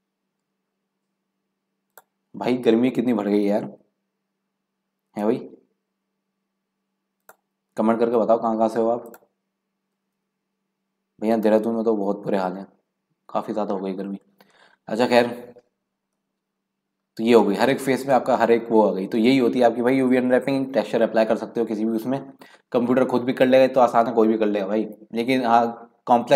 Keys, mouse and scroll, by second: 2.8 s, 3.7 x, 5.0 s, 7.8 g, 10.0 s, 14.6-15.0 scroll down 5, 15.0 scroll up 2, 15.3 middle click, 16.0 scroll down 3, 16.2 middle click, 16.9-17.4 scroll up 1, 17.4-20.4 middle drag.